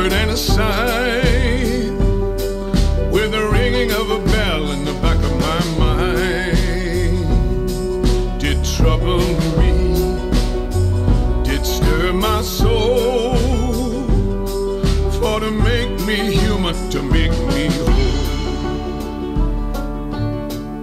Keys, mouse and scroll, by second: 4.6-7.6 shift+drag, 7.6 middle click, 7.6 scroll, 8.4-12.5 drag, 12.5-15.8 right drag, 15.8-20.8 drag.